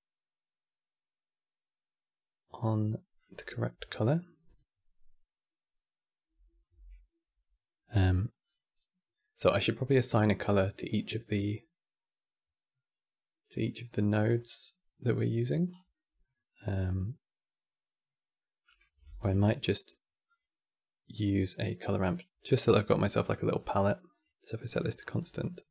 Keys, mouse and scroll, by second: 5.5 click, 6.4 n, 15.4 scroll down 4, 15.6-18.7 middle drag, 18.7 shift+a, 23.8-24.7 drag, 24.7 middle click, 24.9-25.7 scroll up 8.